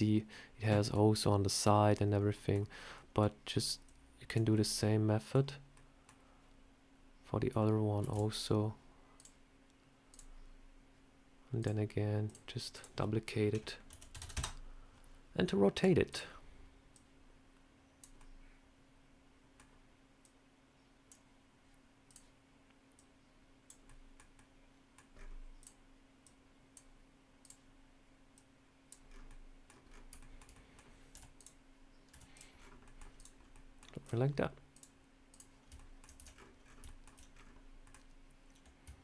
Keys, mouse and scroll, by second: 2.1 scroll up 1, 2.2 middle click, 2.8 middle click, 3.7 click, 4.4 middle click, 5.3 scroll down 2, 5.6 middle click, 7.9 shift+d, 9.0 click, 10.0 click, 11.5 click, 12.1 click, 12.6 click, 15.6 click, 16.0 click, 16.8 click, 18.1 middle click, 20.1 click, 21.9 click, 22.8 click, 23.7 middle click, 24.2 middle click, 25.0-25.6 scroll up 3, 25.5 click, 26.1 click, 27.3 click, 28.2 click, 28.9-29.3 scroll down 3, 29.1 middle click, 29.7 scroll down 3, 30.0 shift+middle click, 30.4 middle click, 31.0 z, 31.9 z, 32.7 middle click, 32.7 scroll down 2, 33.0 click, 33.2 scroll up 2, 33.4 middle click, 33.9 click, 34.6 click, 35.6 ctrl+middle click, 36.0-36.5 ctrl+scroll down 10, 36.7 ctrl+middle click, 37.2 scroll down 2.